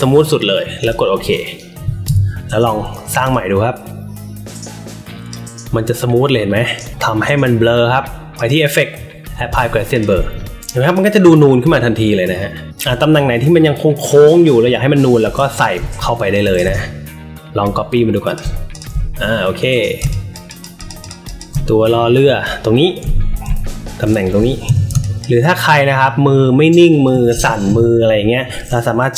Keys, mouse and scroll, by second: 2.0 Delete, 3.3-5.2 drag, 8.3 click, 9.4 click, 9.9 click, 10.2 alt+middle click, 10.5 click, 10.5 space, 11.1-12.7 drag, 14.6-15.0 alt+middle drag, 15.3 space, 15.3 click, 15.7 alt+middle click, 16.5 click, 18.6 click, 19.9 space, 20.0 click, 20.4 click, 20.7 click, 20.9 click, 21.2 click, 23.8 alt+middle click, 24.6 n, 24.9 space, 25.0 click, 27.3 ctrl+z.